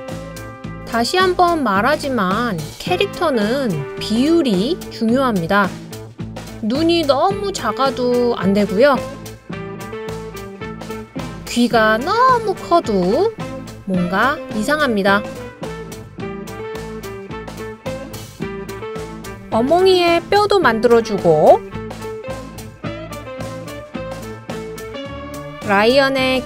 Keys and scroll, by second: 6.0 Up, 6.1 Up, 6.3 Up, 6.4 Up, 6.5 Up, 10.5 d, 17.5 l, 21.3 Right, 21.4 Right, 21.5 Right, 21.6 Right, 21.8 Right, 22.8 super+g.